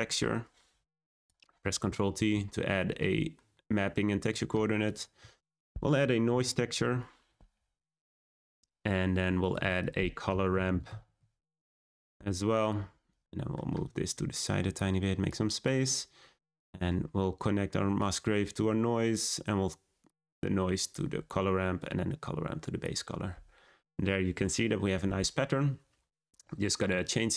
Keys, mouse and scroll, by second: 0.2 shift+a, 2.1 ctrl+t, 4.8 click, 6.8 shift+a, 9.3 click, 11.5 shift+a, 13.7 click, 15.2-19.0 drag, 20.0-20.8 drag, 21.7-22.7 drag.